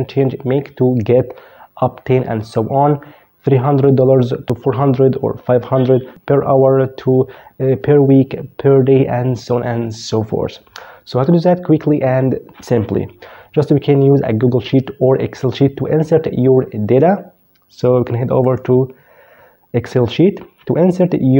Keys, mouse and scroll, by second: 17.6 click.